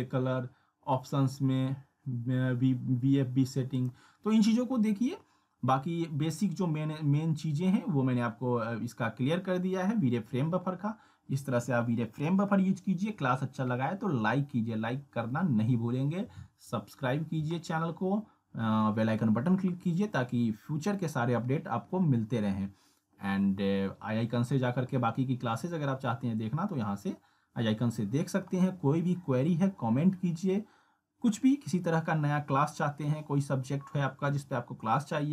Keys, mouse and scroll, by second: 3.8 click.